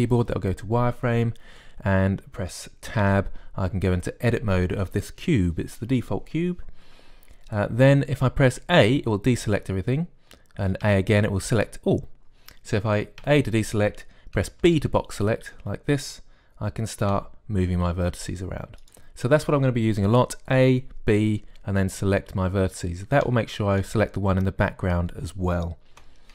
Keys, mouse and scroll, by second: 0.7 z, 4.0 Tab, 9.6 a, 11.7 a, 14.1 a, 15.5 b, 17.9 g.